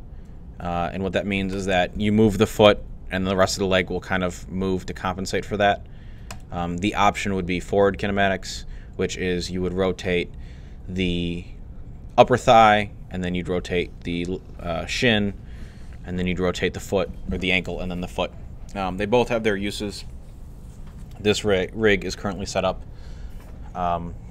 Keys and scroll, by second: 2.5 g.